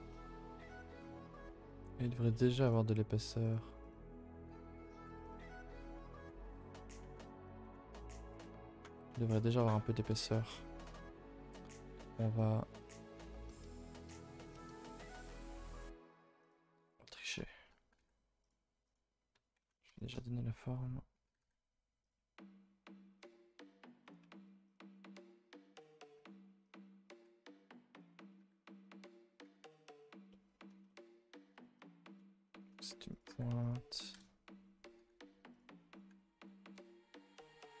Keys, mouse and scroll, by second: 0.1 middle click, 0.9 z, 1.4 shift+middle click, 1.7-2.6 scroll up 2, 2.6 click, 3.4 click, 3.8-5.3 drag, 5.8 click, 6.1-7.3 drag, 7.3-7.8 scroll up 7, 7.6 shift+middle click, 8.1 middle click, 8.5 middle click, 10.1-11.9 middle drag, 10.1 KP_0, 12.1 middle click, 12.6-13.6 scroll up 10, 13.0 shift+middle click, 16.8 KP_0, 17.5 shift+middle click, 17.6-17.9 scroll, 18.8 click, 19.7 click, 20.0 shift+click, 24.6 click, 25.2 click, 26.0 click, 27.1 click, 28.3 click, 29.3 click, 30.3 middle click, 30.7 scroll down 2, 30.9 shift+middle click, 31.0-32.1 scroll up 12, 31.6 shift+middle click, 32.1 middle click, 32.7-33.1 scroll up 2, 33.1 click, 33.3 g, 34.1 KP_0, 35.9 click, 36.7 KP_0, 37.3-37.8 middle drag.